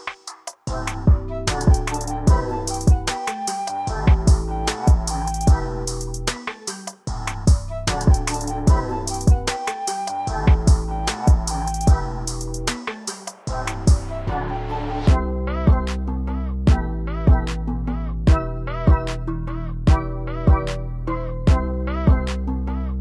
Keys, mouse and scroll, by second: 0.0-1.0 drag, 1.4-2.4 drag, 4.6-5.6 drag, 7.7 click, 10.2-11.2 drag, 11.4-12.4 drag, 14.5 click, 15.2 space, 16.9 space, 17.4-18.4 drag, 18.5-19.5 drag, 19.8 click, 20.0 space, 21.3 space, 21.8-22.8 drag.